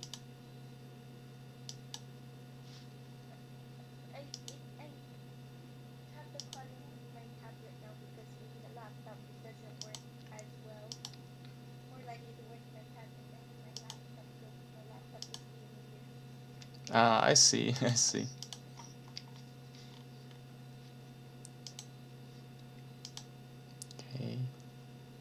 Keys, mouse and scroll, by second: 0.0 click, 1.7 click, 4.3 click, 4.6-5.7 middle drag, 6.4 click, 9.8 click, 10.9 click, 13.8 click, 15.2 click, 17.7 click, 18.4 click, 19.2 scroll down 1, 19.9-20.5 scroll down 4, 21.7 click, 23.0 click.